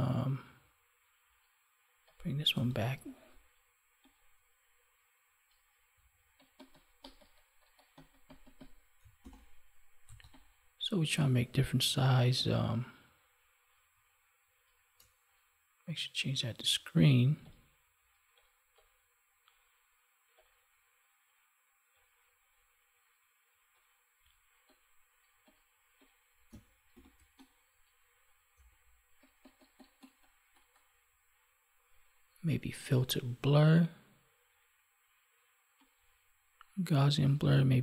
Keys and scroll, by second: 9.2 ctrl+j, 26.8 ctrl+j.